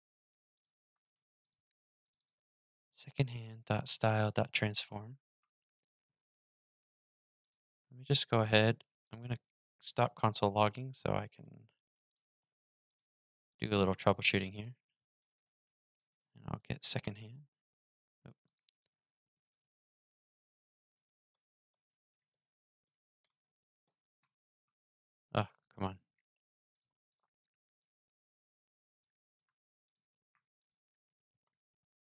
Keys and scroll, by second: 11.1 super+/, 12.1 super+s, 14.2 super+r, 29.1 super+c, 30.8 super+v.